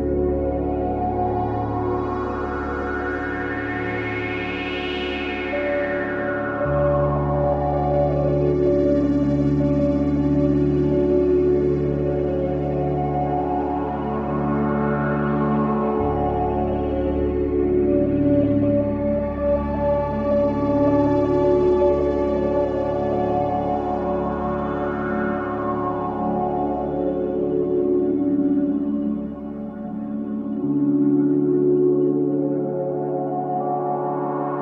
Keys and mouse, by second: 0.0-0.7 typing, 2.0-3.3 drag, 3.1 g, 3.5-4.8 drag, 4.3 space, 6.2 space, 8.8-11.1 drag, 11.2-12.8 drag, 11.9 typing, 13.4-15.3 drag, 19.5-20.6 drag, 22.7-23.8 drag, 24.0 click, 24.4 click, 25.2 click, 26.0 click, 26.0 Home, 28.0-29.0 drag, 29.0 click, 29.9 g, 30.4 x, 32.3-33.7 drag, 33.3-33.7 typing.